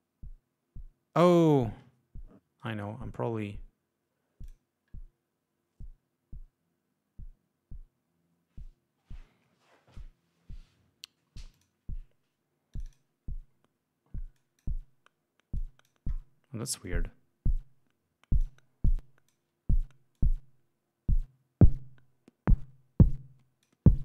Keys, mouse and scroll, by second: 2.7 right click, 4.5 click, 11.6 click, 12.8 click, 14.4 click, 15.6 click, 16.9-18.7 drag, 18.9 click, 20.2-23.9 drag.